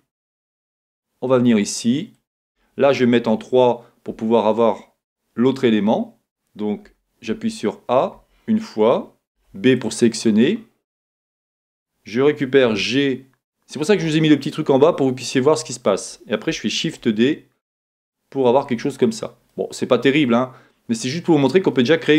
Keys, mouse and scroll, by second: 3.4-9.7 middle drag, 7.1 a, 9.4 b, 12.6-16.8 middle drag, 12.6 g, 16.8 shift+d, 19.5-22.1 middle drag.